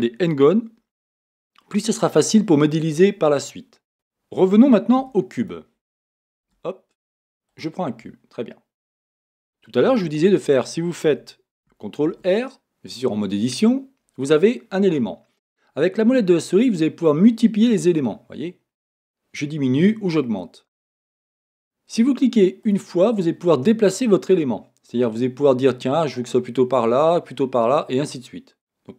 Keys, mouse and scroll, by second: 1.2-3.9 middle drag, 3.9 Tab, 5.0 x, 6.4 shift+a, 10.1 Tab, 11.1 a, 12.1 ctrl+r.